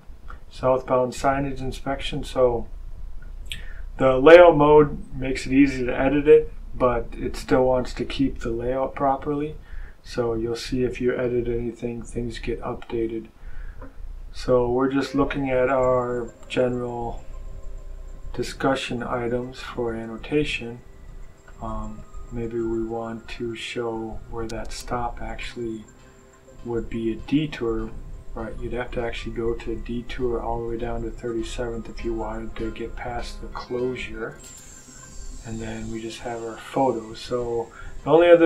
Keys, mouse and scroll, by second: 8.8-9.8 scroll down 2, 9.8-10.4 scroll down 2, 10.8-11.1 scroll down 2, 12.7 scroll down 1, 14.8 scroll down 1, 18.6-19.4 scroll down 1, 19.4-20.2 scroll down 1, 20.4-21.6 scroll down 2, 21.9-24.5 drag, 25.3-25.9 scroll down 1, 27.2-30.2 scroll up 1, 33.4-33.9 scroll down 1, 34.3-34.9 scroll down 1, 34.9 scroll down 1, 35.7-36.8 scroll down 1, 37.0-38.4 scroll up 2.